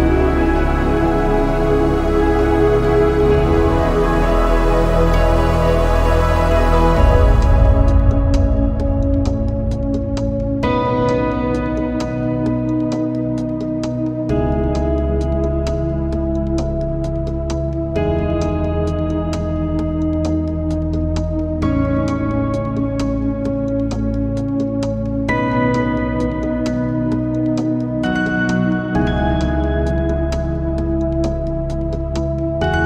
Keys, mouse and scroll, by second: 0.0 a, 0.3 middle click, 2.9-4.0 middle drag, 9.8 click, 10.2 middle click, 10.6 ctrl+s, 10.8 click, 11.2 middle click, 11.4 z, 11.4 middle click, 12.4 click, 12.6 z, 12.7 middle drag, 13.0 scroll down 1, 13.2 a, 13.6 middle click, 13.8 right click, 14.4 click, 14.9 click, 15.8 click, 16.6 scroll up 2, 16.7-17.4 scroll down 1, 21.5 drag, 23.5 ctrl+z, 23.9 n, 24.4 click, 24.8 middle click, 25.6 click, 26.7-27.4 middle drag, 27.4 click, 27.7-28.2 shift+middle drag, 28.2 z, 28.3 middle click, 29.0 click, 29.2 click, 29.6 click, 29.8-30.5 middle drag, 30.8 scroll up 1, 30.9 scroll down 2, 31.0-31.3 shift+middle drag, 31.3 scroll up 1, 31.5 z, 31.9 z, 32.0-32.7 middle drag.